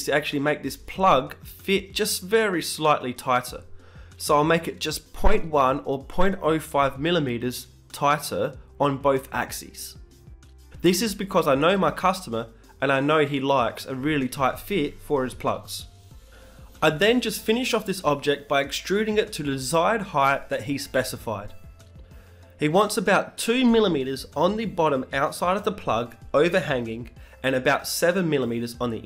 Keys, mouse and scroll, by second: 0.5-2.5 middle drag, 2.5 ctrl+Up, 3.5 t, 4.1-7.0 middle drag, 5.3 Tab, 7.0-8.8 right drag, 7.3 b, 9.3 g, 13.8-15.3 right drag, 14.0 b, 15.2 s, 15.3 g, 18.0 Tab, 20.4-22.6 middle drag, 22.8 KP_1, 23.2 Tab, 23.5 middle click, 23.9-27.6 right drag, 24.2 b, 27.0 g.